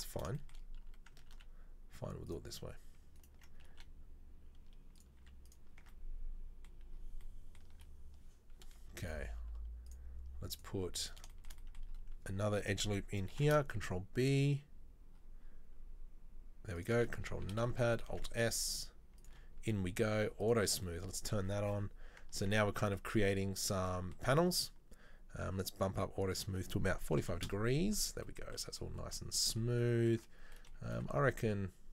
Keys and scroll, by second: 1.4 ctrl+z, 3.9 e, 5.2 z, 5.9 Tab, 7.8 Tab, 13.5 ctrl+b, 17.7 ctrl+KP_Subtract, 18.2 alt+s, 22.5 Tab, 23.7 Tab, 23.9 Tab, 29.8 Tab, 31.0 ctrl+r.